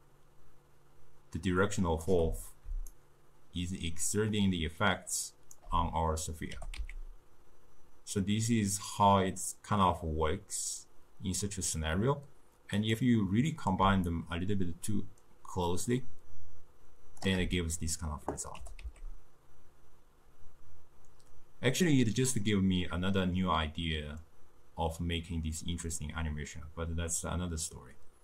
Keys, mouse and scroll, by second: 2.8 d, 3.0-5.7 right drag, 5.7 d, 6.6 g, 14.2-17.3 shift+drag, 18.7 g.